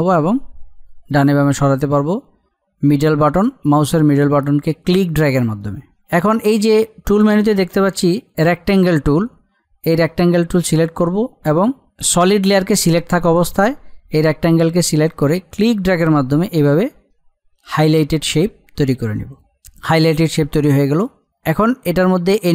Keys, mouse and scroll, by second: 0.2-7.1 middle drag, 9.8 click, 15.6-20.5 drag, 21.2 click.